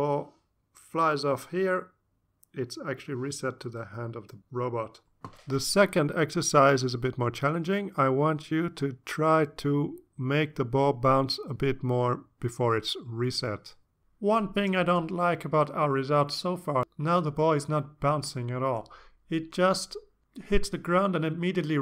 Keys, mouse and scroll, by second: 7.5 click.